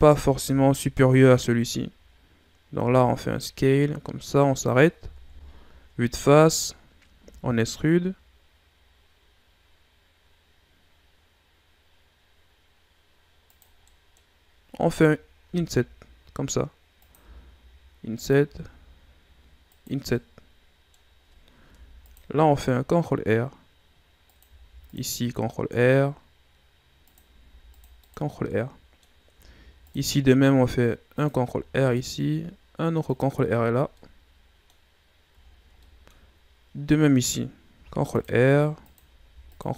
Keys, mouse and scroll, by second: 0.4 KP_7, 2.8 s, 5.2 KP_1, 6.2 shift+scroll up 2, 7.2 e, 13.9 middle click, 14.3-15.0 scroll up 2, 15.4 i, 17.2 i, 20.2-21.7 middle drag, 21.7 ctrl+r, 24.6 ctrl+r, 27.4 ctrl+r, 28.5-29.5 middle drag, 29.5 ctrl+r, 31.6 ctrl+r, 33.9 middle click, 34.8-35.4 scroll down 1, 35.4 scroll down 3, 35.8 middle click, 36.5-37.7 scroll up 1, 37.7 ctrl+r, 39.2 ctrl+r.